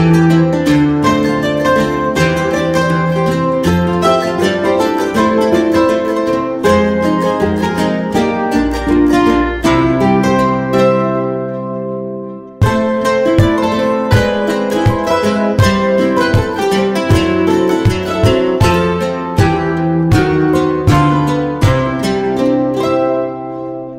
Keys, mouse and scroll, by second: 1.0 middle click, 2.0 middle click, 3.8 middle click, 4.5 middle click, 4.9 ctrl+click, 6.8 middle click, 7.4 middle click, 7.7 ctrl+click, 8.9 middle click, 10.0 middle click, 10.6-11.2 scroll down 1, 11.5 ctrl+click, 13.4 middle click, 14.1 middle click, 15.0 ctrl+click, 16.9 middle click, 17.0 middle click, 17.5 middle click, 18.0 middle click, 19.0 click, 20.8 click, 21.2 middle click, 22.1 middle click, 22.5 middle click, 22.9 middle click, 22.9-23.3 scroll up 1, 23.7 click.